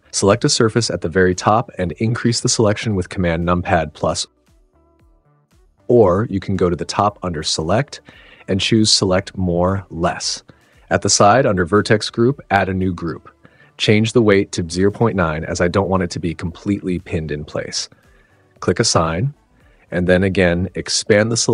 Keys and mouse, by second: 0.8 click, 2.0 click, 3.5 super+=, 3.8 super+=, 3.9 super+=, 5.2 super+=, 5.3 super+=, 7.3-11.2 drag, 12.3 super+z, 13.1 click, 14.0 click, 19.0 click, 21.0 super+=.